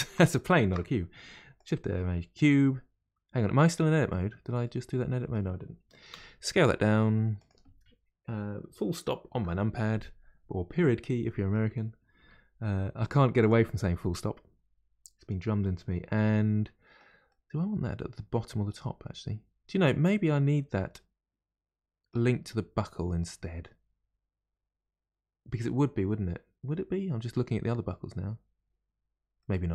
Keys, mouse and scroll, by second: 0.6 shift+a, 3.4-3.8 scroll down 1, 4.6-6.0 middle drag, 6.0 s, 9.3 KP_Decimal, 10.1-11.0 scroll down 8, 11.0-12.2 middle drag, 12.2 s, 13.7-16.8 middle drag, 17.2-22.1 middle drag, 29.4-29.7 middle drag.